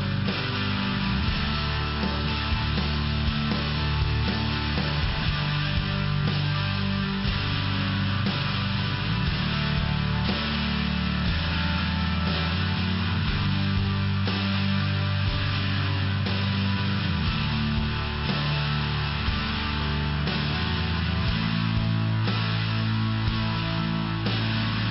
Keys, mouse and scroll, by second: 2.7 click, 5.5 click, 7.3 click, 10.7 click, 15.4 click, 15.5 click, 16.9 click, 17.0 click, 18.5 click, 18.7 click, 19.6 click, 24.6 click, 24.7 click.